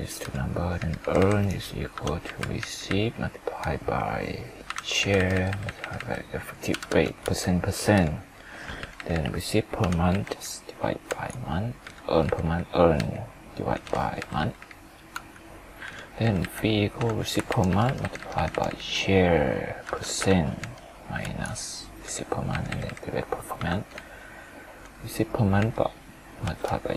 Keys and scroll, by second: 17.5 ctrl+Left.